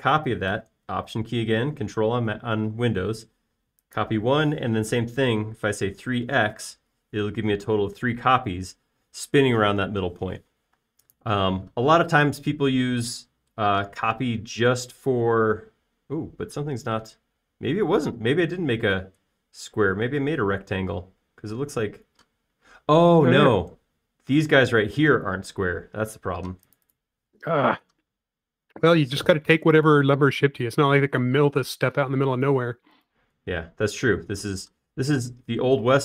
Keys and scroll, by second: 6.8-7.7 typing, 12.1 space, 28.8 p, 30.0-31.8 typing, 35.4 space.